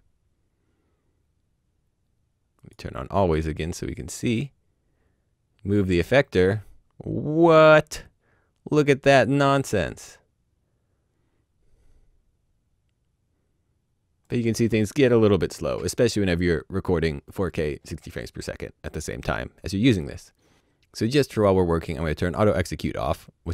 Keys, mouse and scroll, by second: 2.5 click, 4.2 click, 15.4 click, 22.1 click.